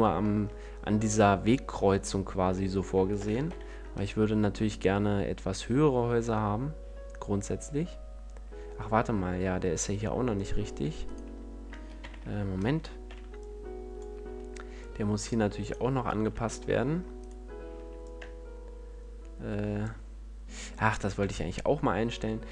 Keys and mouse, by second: 3.1 shift+d, 12.9 c, 15.6-19.7 drag, 16.2 c, 20.9-22.5 drag.